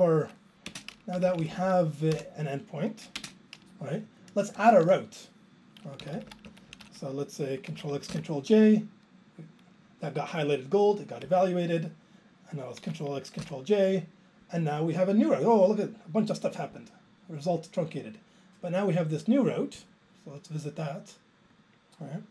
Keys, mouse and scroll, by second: 0.7 ctrl+space, 1.1 Down, 1.3 Down, 1.4 Down, 1.5 Down, 1.6 Down, 2.1 BackSpace, 3.2 alt+space, 4.6 Return, 6.0 Down, 6.2 Down, 6.2 Down, 6.4 Left, 6.7 Right, 6.8 Up, 6.9 Left, 8.4 ctrl+j, 11.2 Down, 13.6 ctrl+j, 16.8 click, 19.8 click.